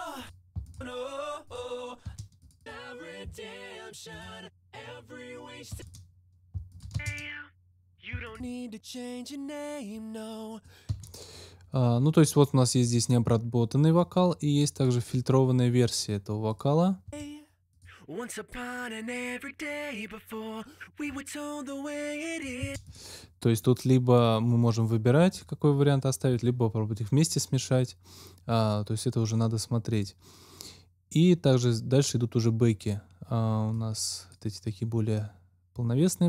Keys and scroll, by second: 2.0 space, 5.6 space, 6.5 alt+space, 6.9 alt+space, 10.8 space, 17.0 space, 22.5 space.